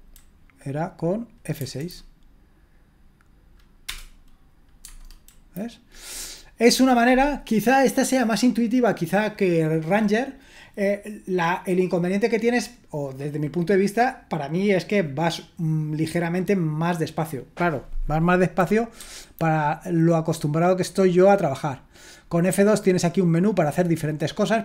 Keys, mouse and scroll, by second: 1.6 F6, 3.9 Return, 4.8 Tab, 18.9 F2.